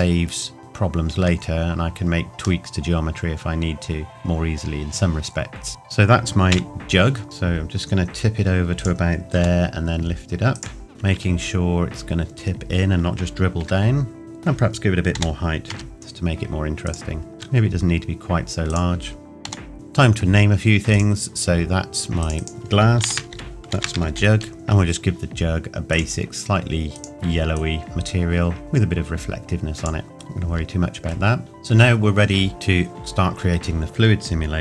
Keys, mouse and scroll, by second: 0.1 middle click, 1.2 Tab, 1.8 scroll down 1, 2.6 middle click, 5.7 ctrl+s, 6.5 KP_1, 7.2 r, 8.7 click, 9.3 g, 10.5 click, 10.9 shift+middle click, 12.5-13.6 scroll down 1, 13.6 r, 14.2 middle click, 15.1 g, 16.8 click, 17.2 scroll down 1, 17.3 s, 18.7 click, 19.4 g, 19.7 click, 23.0 shift+g, 23.4 click, 24.5 click, 30.1 middle click, 30.9-31.2 scroll up 1, 31.4 click.